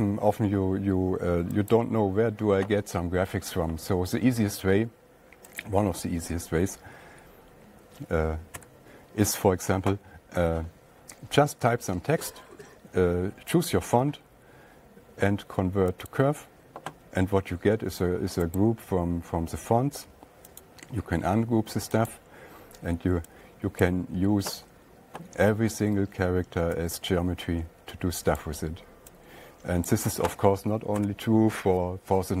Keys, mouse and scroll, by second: 2.2 click, 7.1 click, 9.0 /, 14.2 right click, 16.8 click, 19.0 right click, 21.1 click, 22.5 click, 28.9 click, 30.3 click, 31.5 *.